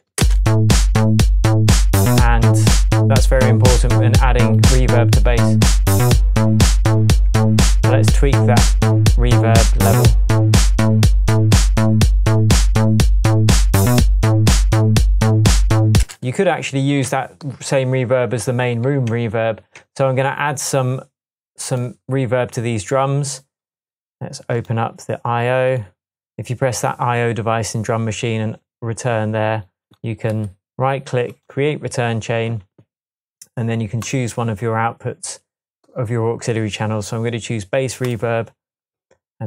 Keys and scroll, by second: 0.2 shift+space, 1.0 Tab, 2.5 Tab, 7.3 Tab, 16.0 super+space, 16.9 space, 17.0 Tab, 19.1 shift+Tab.